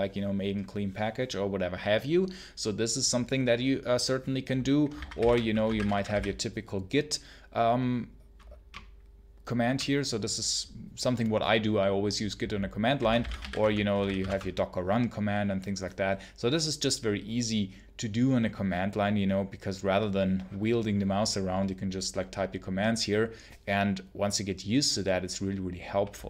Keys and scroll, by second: 4.8-6.5 typing, 8.6 BackSpace, 12.6-14.5 typing.